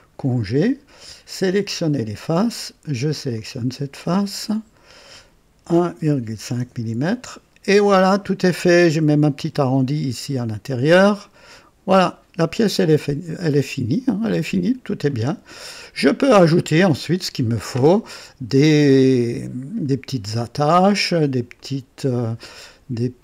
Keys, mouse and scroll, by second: 1.4 click, 3.3 click, 4.4 click, 5.6-6.8 typing, 6.5 KP_Enter, 8.0 click, 8.6 typing, 10.9-14.7 drag, 11.0-13.0 typing, 14.6 typing, 15.0-16.2 drag, 16.3 click, 19.0 click, 19.7-22.9 typing, 20.5 click, 21.5-23.0 drag, 22.4 right click.